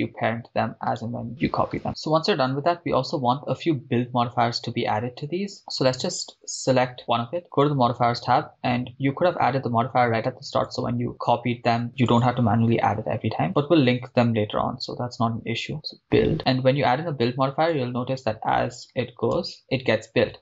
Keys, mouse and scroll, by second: 1.2 right click, 2.1 shift+middle click, 3.0-3.6 scroll up 1, 5.6 right click, 7.5 click, 10.9 click, 12.1-16.4 drag, 17.9-19.5 drag, 19.5 shift+space.